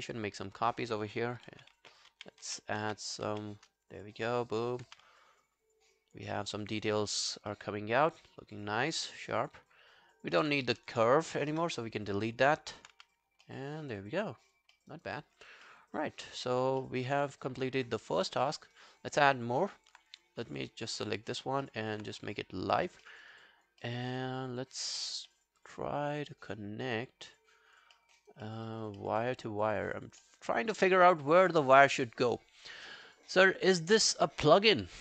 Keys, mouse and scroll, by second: 0.0 shift+click, 1.5 shift+d, 1.8 shift+d, 2.5 shift+d, 2.8 shift+d, 4.3 alt+scroll down 1, 4.5 alt+click, 4.9 q, 5.2 alt+scroll down 1, 5.4 alt+click, 6.4 alt+middle click, 6.5 alt+right click, 6.8 alt+click, 7.2-8.0 alt+scroll down 3, 7.5 alt+middle click, 8.1 alt+click, 8.7 alt+scroll down 1, 9.0 alt+click, 9.7-10.2 alt+scroll up 3, 11.5 Delete, 12.0 scroll down 1, 12.6 scroll down 2, 12.6 alt+click, 13.0 q, 13.5 alt+middle click, 13.8 alt+scroll down 3, 14.0 alt+click, 14.8 alt+middle click, 14.9 alt+right click, 15.2 alt+click, 15.7 alt+middle click, 16.0 alt+scroll down 1, 16.3 alt+middle click, 16.8 alt+middle click, 17.0 alt+right click, 17.3 alt+click, 18.5 alt+middle click, 18.8 alt+right click, 19.2 alt+middle click, 19.6 alt+scroll up 1, 19.8 alt+click, 20.4 alt+scroll down 1, 20.6 alt+click, 21.7 alt+middle click, 23.1 alt+middle click, 23.2 alt+right click, 23.4 alt+click, 23.9 alt+middle click, 24.2 alt+click, 25.3 alt+middle click, 25.6 alt+click, 28.0 alt+middle click, 28.2 alt+right click, 28.5 alt+middle click, 28.7 alt+right click, 29.0 alt+middle click, 29.2 alt+right click, 29.4 alt+click, 30.2 alt+middle click, 30.5 alt+right click, 30.6 alt+click, 31.1 alt+middle click.